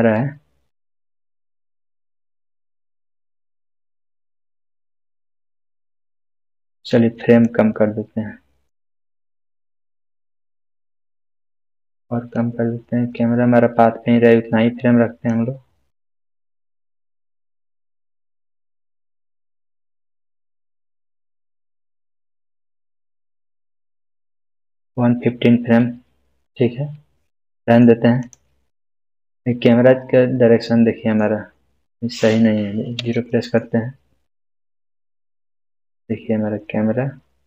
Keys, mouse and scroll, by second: 7.7-8.7 drag, 12.6-15.4 drag, 21.9-25.0 drag, 26.4-27.9 middle click, 28.2 click, 28.7-29.3 scroll up 1, 29.3-31.2 middle drag.